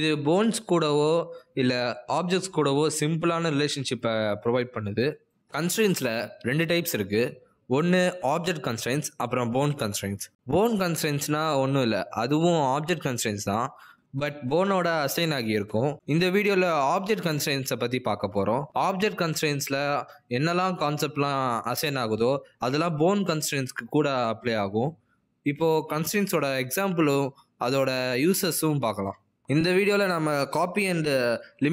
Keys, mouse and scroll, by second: 0.4 r, 3.5 click, 5.6 click, 8.3 shift+a, 9.9 g, 10.9 ctrl+Tab, 11.2 click, 12.9 click, 17.0 click, 18.0 click, 20.1 click, 22.7 ctrl+Tab, 23.1 x, 24.1 click.